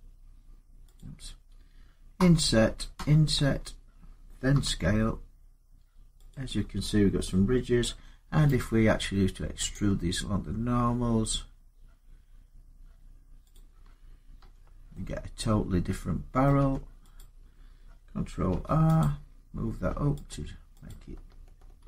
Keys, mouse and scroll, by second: 0.8 click, 2.0 i, 2.7 i, 4.3 s, 6.1 click, 8.4 right click, 9.5 click, 14.2 Tab, 16.2 middle click, 16.4 Tab, 17.0 click, 18.3 ctrl+r, 18.8 click, 20.1 click, 20.7 click, 21.6 ctrl+r.